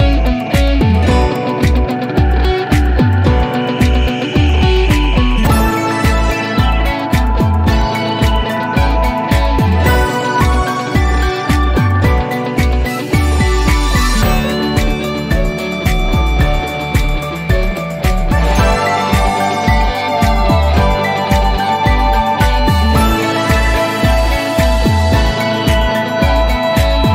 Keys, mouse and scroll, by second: 2.1 typing, 3.5 Return, 6.0 click, 6.7 scroll down 1, 18.9 scroll down 1, 21.8 click, 23.8 click.